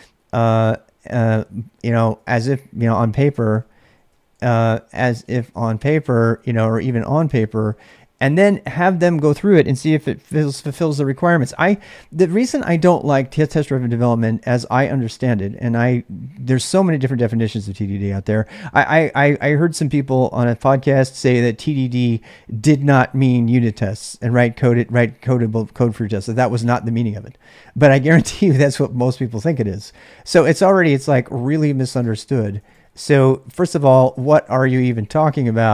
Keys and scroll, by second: 1.3-10.2 typing, 11.4 typing, 11.7 Return, 30.7-35.7 typing.